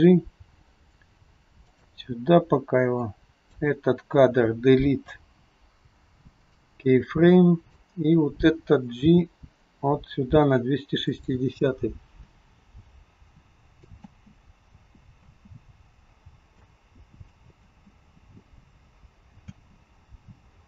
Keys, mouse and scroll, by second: 3.0 click, 5.2 Delete, 7.4 click, 9.1 g, 12.6 click, 14.1 space, 15.2 space, 16.7 click, 17.6 space, 19.6 space.